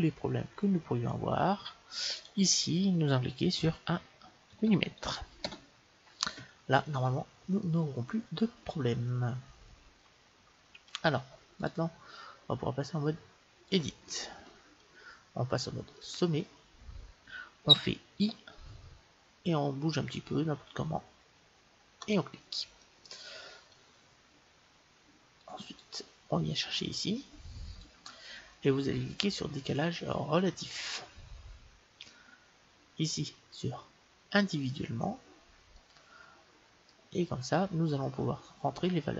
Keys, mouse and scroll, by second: 2.1-4.1 drag, 4.6 m, 7.7-9.5 middle drag, 11.6-13.5 drag, 14.4-16.0 middle drag, 16.0-17.7 drag, 18.2 i, 22.8-24.7 middle drag, 25.4-28.6 drag, 30.4-31.5 drag, 32.0 click, 34.3-36.2 drag, 35.8-37.5 middle drag.